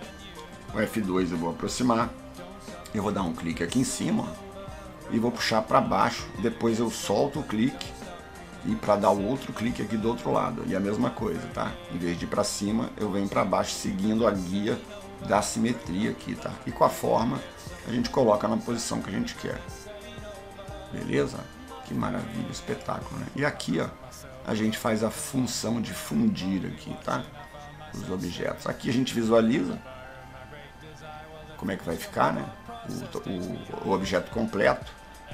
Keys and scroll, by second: 16.5 F10.